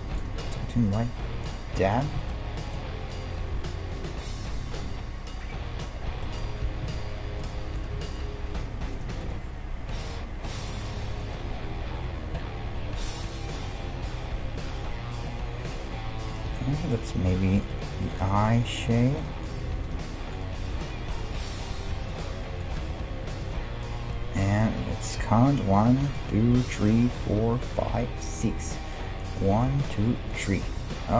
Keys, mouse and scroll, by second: 0.2-1.8 right drag, 1.8 f, 2.0 right click, 2.3-4.2 middle drag, 6.4-7.8 middle drag, 6.9 ctrl+Tab, 7.8-12.3 right drag, 8.6 g, 9.6 g, 11.0 g, 16.7-18.3 middle drag, 17.6-24.4 right drag, 17.9 g, 18.9 g, 19.6 g, 20.6 g, 21.8 g, 22.8 g, 24.6-31.1 right drag.